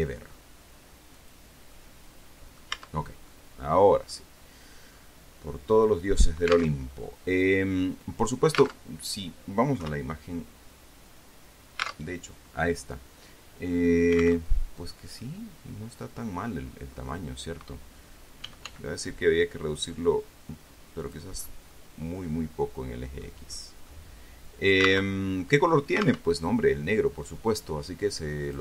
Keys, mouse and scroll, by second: 1.5 click, 2.1-3.1 middle drag, 3.1 Tab, 3.6 click, 3.7 middle click, 3.8 click, 5.3 scroll down 2, 5.8-7.1 drag, 7.1 alt+Tab, 9.2 alt+Tab, 10.1 KP_3, 12.4 alt+Tab, 14.8 alt+Tab, 15.5-17.6 middle drag, 18.8 s, 19.0 x, 21.3 click, 21.7 scroll down 1, 22.1-23.7 middle drag, 23.9 scroll down 1, 24.2 middle click, 24.2-25.4 drag, 25.4 alt+Tab, 26.6 alt+Tab.